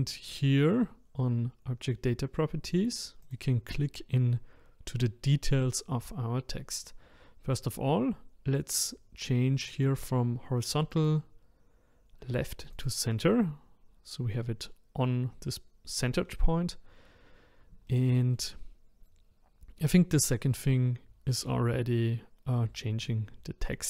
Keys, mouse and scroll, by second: 3.3 click, 10.9-14.0 drag, 17.8-21.0 shift+middle drag.